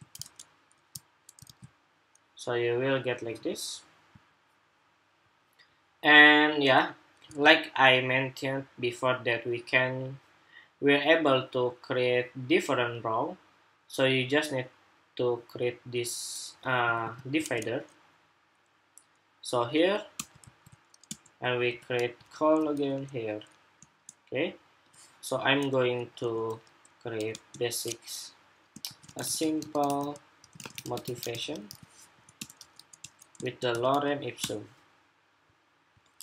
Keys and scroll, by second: 0.0 super+Tab, 0.5 super+Tab, 1.2 super+r, 7.0 super+Tab, 16.6 super+c, 17.2 super+Tab, 20.1 super+v.